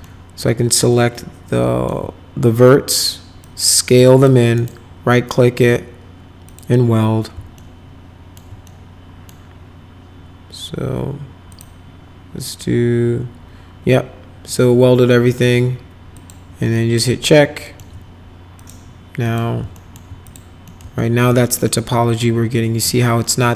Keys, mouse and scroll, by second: 0.0-1.8 alt+middle drag, 3.4 click, 4.5 right click, 6.4 click, 7.5 alt+middle click, 8.6 middle click, 11.5 click, 16.1 click, 16.7 middle click, 17.2 alt+middle click, 18.5 click, 19.2 click, 19.7 alt+middle click, 20.2 click, 20.6 middle click, 21.0 alt+middle click, 21.5 middle click, 23.2 middle click.